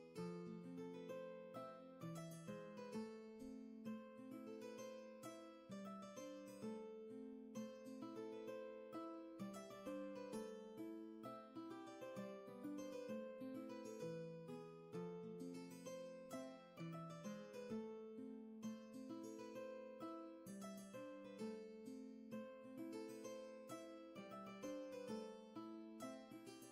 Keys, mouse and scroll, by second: 3.7 space, 18.4 space, 19.3 shift+space, 20.2 ctrl+z, 20.8 space, 23.2 ctrl+z.